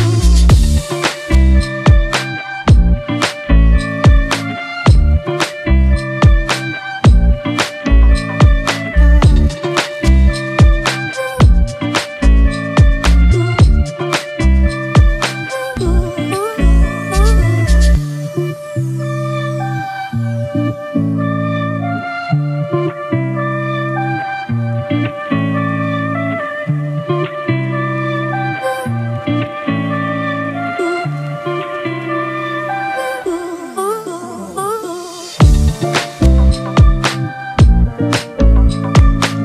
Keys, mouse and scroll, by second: 24.5 double click, 37.9 ctrl+alt+shift+e.